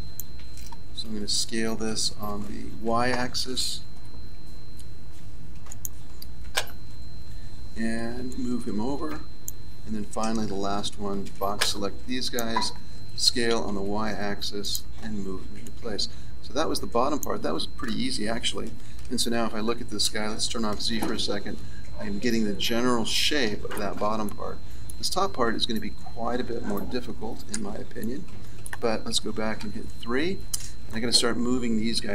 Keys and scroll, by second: 1.8 s, 10.4 a, 20.6 z, 26.5 a, 27.5 z, 29.5 KP_3.